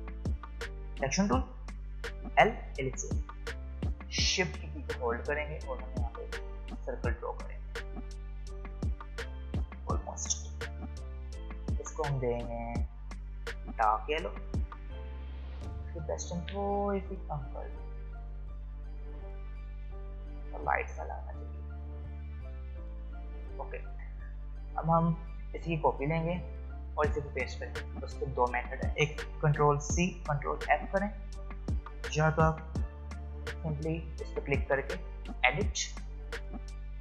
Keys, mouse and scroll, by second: 0.8 click, 2.2 l, 5.2 l, 6.0-10.4 alt+shift+drag, 10.4 v, 11.1-13.5 drag, 24.7 alt+scroll up 1, 25.5 click, 29.9 ctrl+c, 30.6 ctrl+f, 32.7 ctrl+z, 35.4 click.